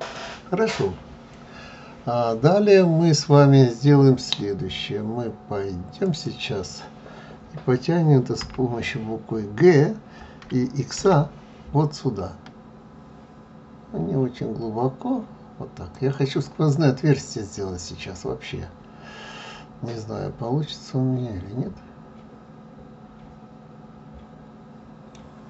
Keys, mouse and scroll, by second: 6.0 click, 8.4 g, 16.7-19.8 middle drag.